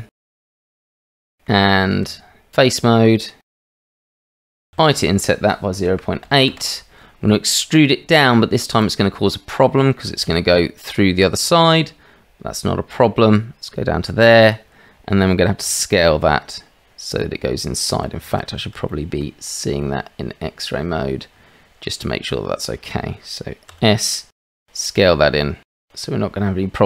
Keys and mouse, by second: 1.2 middle click, 1.6 shift+middle click, 2.0 Tab, 3.4 click, 4.7 i, 9.8 shift+right click, 10.2 e, 15.6 s, 18.2 shift+z, 18.9 shift+middle click, 19.8-22.7 middle drag, 23.7 s.